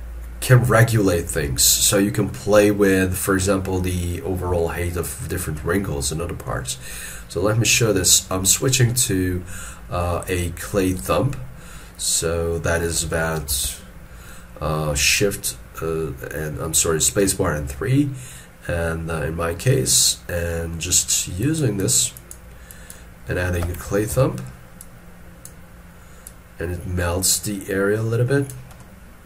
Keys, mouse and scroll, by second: 2.3 middle click, 3.5-4.0 scroll up 1, 4.0 scroll down 1, 4.6 ctrl+middle click, 10.3 scroll up 1, 10.6 scroll down 1, 13.4 space, 13.5 3, 21.5 double click, 24.2 ctrl+z, 28.8 middle click.